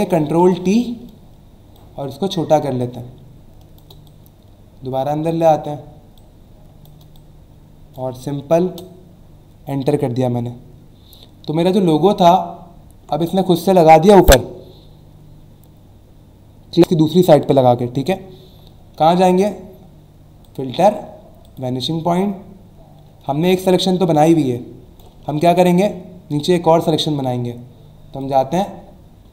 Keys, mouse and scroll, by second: 1.7 alt+shift+click, 6.2 shift+click, 8.7 Return, 12.0 alt+scroll down 1, 20.4 click, 21.4 click, 24.3 alt+click, 25.3 ctrl+z, 25.8-26.2 alt+scroll up 1, 28.2 click.